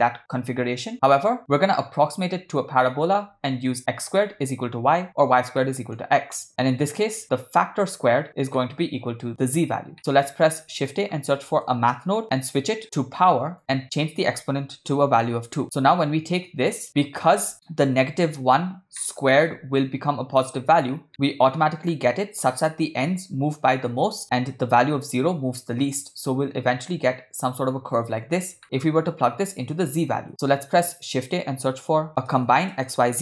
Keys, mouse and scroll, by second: 5.6 middle click, 6.4 middle click, 8.6 middle click, 10.0 middle click, 10.2 shift+a, 12.8-13.6 drag, 14.0-15.0 drag, 16.1 click, 17.0 middle click, 17.6 middle click, 19.0 middle click, 21.1 middle click, 21.1 click, 28.6 middle drag, 30.5 shift+a.